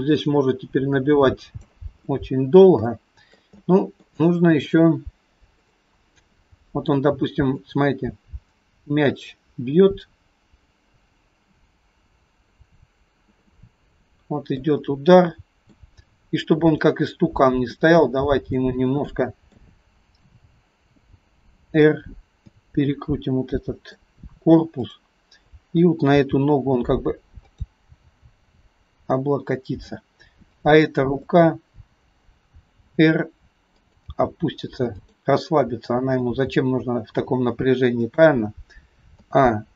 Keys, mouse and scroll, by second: 2.2 middle click, 2.9 shift+middle click, 3.7 middle click, 4.3 shift+middle click, 5.7 click, 7.6 click, 13.5 middle click, 14.7 scroll up 1, 14.8 middle click, 16.7 click, 17.3-17.7 scroll down 3, 17.8 middle click, 19.0 middle click, 19.0 scroll up 1, 20.3 KP_7, 21.6 r, 23.0 middle click, 24.8 click, 26.2 g, 28.0 g, 29.6 middle click, 30.6 click, 31.3 middle click, 32.8 r, 34.2 g, 35.5 middle click, 36.5 g, 39.2 a.